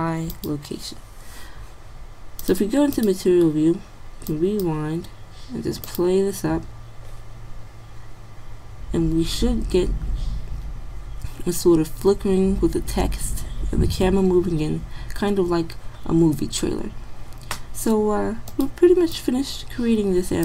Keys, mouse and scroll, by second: 7.4 middle click, 13.1 middle click, 18.5-20.4 drag.